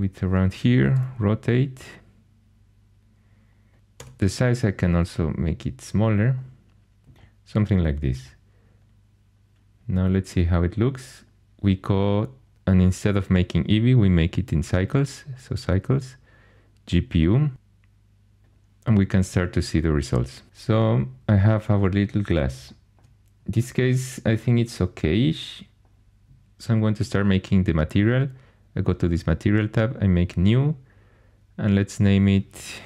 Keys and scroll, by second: 0.9 r, 3.5-4.5 typing.